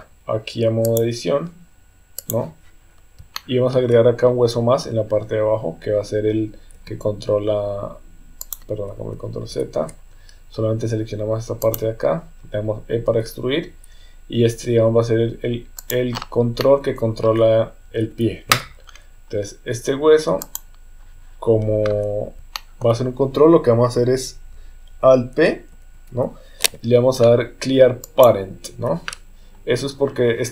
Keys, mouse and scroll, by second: 0.8-2.3 drag, 3.3 shift+middle click, 6.7 e, 9.5 ctrl+z, 11.7 click, 13.1 e, 16.6 middle click, 16.7 scroll up 1, 16.7 middle click, 17.2-18.1 scroll down 1, 18.1 KP_3, 22.5 shift+middle click, 25.9 alt+p.